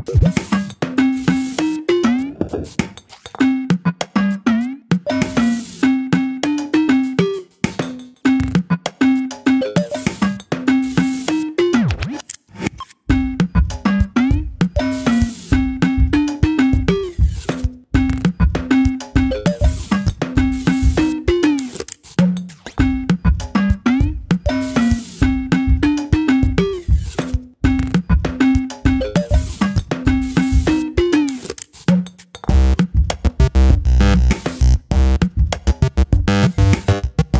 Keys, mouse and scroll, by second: 0.4 click, 1.9 r, 2.9 click, 4.4 click, 5.2 click, 5.6-6.1 scroll down 4, 6.4-8.3 drag, 8.7-12.4 drag, 12.4 scroll down 1, 12.5 middle click, 12.9 click, 13.0 scroll up 3, 13.2 click, 14.5 click, 15.4 click, 16.5 click, 16.7 middle click, 17.6 drag, 18.3-18.7 scroll down 2, 18.7 click, 19.4 BackSpace, 20.7 middle click, 21.5 KP_1, 21.9-22.5 scroll up 2, 22.0 shift+middle click, 22.5 shift+middle click, 22.9 click, 23.4 click, 23.6 click, 24.4 ctrl+z, 24.9 click, 25.4 g, 26.1 KP_3, 26.5 shift+middle click, 26.8 g, 29.0 ctrl+click, 29.9 middle click, 30.7 KP_3, 31.4 KP_3, 32.2 g, 34.5 click, 35.0 g, 36.2 click, 36.5 KP_1, 36.8-37.2 scroll up 1, 37.2 e.